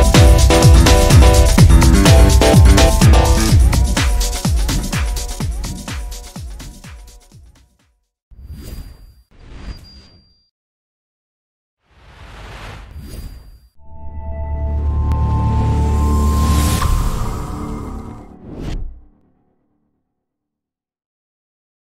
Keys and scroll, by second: 1.5 ctrl+z.